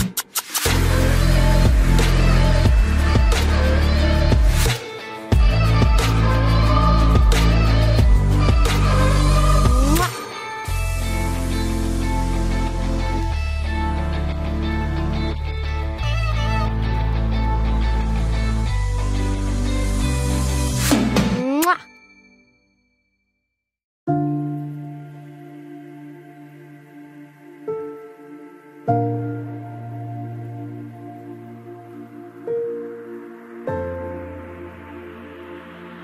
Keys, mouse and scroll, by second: 0.0-1.0 middle drag, 1.9 KP_3, 2.8 z, 3.3 c, 4.1-5.3 drag, 6.3 c, 7.1 right click, 8.0-9.3 middle drag, 11.5-12.9 middle drag, 12.9 KP_Decimal, 13.8 i, 17.1 z, 17.6-18.9 drag, 20.4 ctrl+b, 21.5 Tab, 22.2 ctrl+s, 23.0 KP_3, 23.7 Tab, 23.9 z, 26.7 middle click, 27.4-28.6 middle drag, 30.3 click, 30.7 c, 31.9 c, 33.8-35.9 right drag, 35.9-36.0 middle drag, 35.9 c.